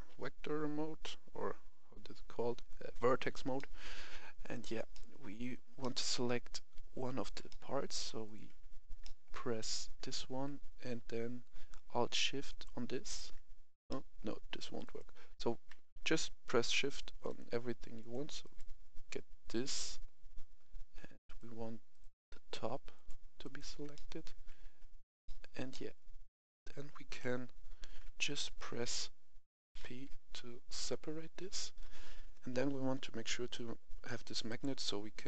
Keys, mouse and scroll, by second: 3.5 middle click, 4.4 right click, 4.8-6.9 middle drag, 8.2 right click, 9.0 middle click, 12.4 alt+shift+right click, 13.8 middle click, 14.8 right click, 17.2 shift+right click, 17.9 shift+right click, 18.4 shift+right click, 21.2 shift+right click, 21.8 shift+right click, 22.9 shift+right click, 23.4 shift+right click, 23.9-26.9 middle drag, 27.1 KP_1, 28.0 scroll down 1, 28.3 shift+middle click, 28.9-29.7 scroll up 1, 29.7-30.6 scroll up 1, 30.6 click.